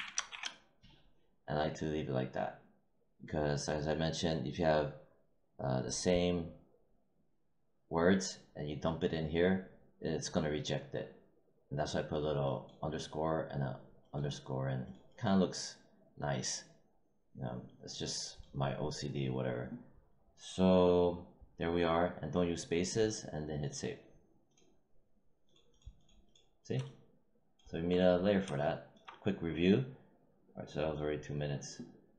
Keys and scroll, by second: 0.0-0.2 typing.